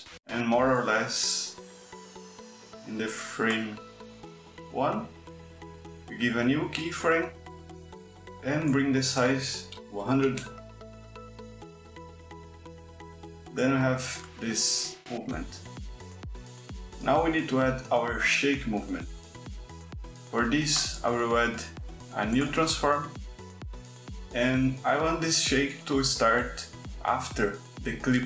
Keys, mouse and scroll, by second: 1.2-3.4 drag, 5.8 click, 8.1 click, 9.0 KP_1, 9.2 KP_0, 9.9 KP_Enter, 12.3 click, 13.3 space, 15.0 space, 15.9 click, 19.9 click, 21.1 click, 22.1 click.